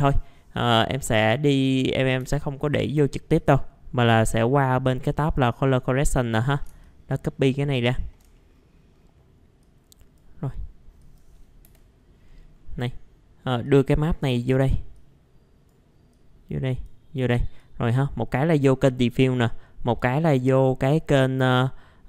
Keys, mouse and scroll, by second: 2.2 Delete, 2.6 right click, 3.3-6.6 drag, 6.8 ctrl+shift+click, 8.3 middle click, 8.5-9.6 scroll down 1, 9.6 click, 11.6 Delete, 12.2-12.8 scroll up 1, 12.8 middle click, 13.6 click, 14.9 click, 16.1-17.3 drag, 17.3-19.3 drag, 19.3-22.0 drag.